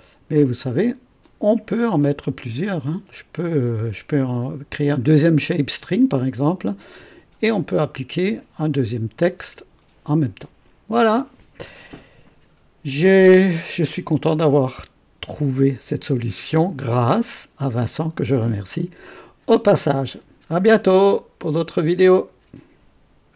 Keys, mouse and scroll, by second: 0.8 click, 7.9 Escape, 7.9 Escape, 9.4 click, 22.2 right click.